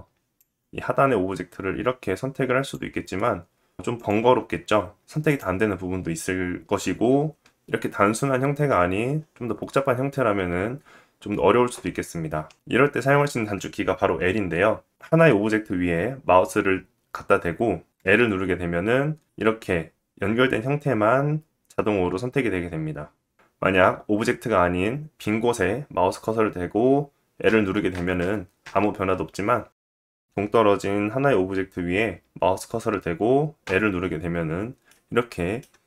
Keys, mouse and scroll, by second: 2.7 middle click, 4.3-5.3 middle drag, 5.3-8.0 drag, 8.0-24.2 middle drag, 12.5 alt+z, 18.3 l, 23.0 l, 27.0 l, 27.5 l, 30.2 middle click, 33.2 l, 34.4 middle click.